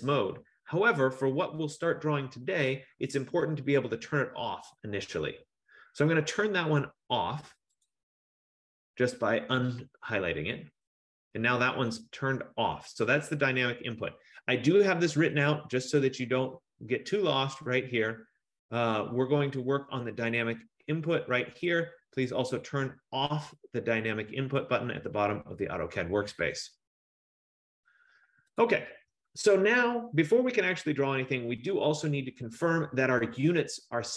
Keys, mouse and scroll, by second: 7.9 click, 15.6 click, 26.5 click, 28.9 click.